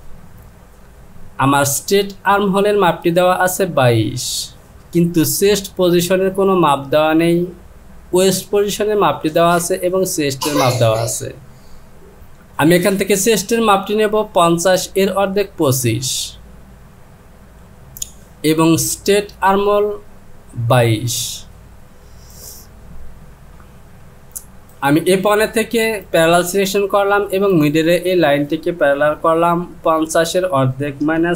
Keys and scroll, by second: 30.2 Down, 31.0 KP_Subtract.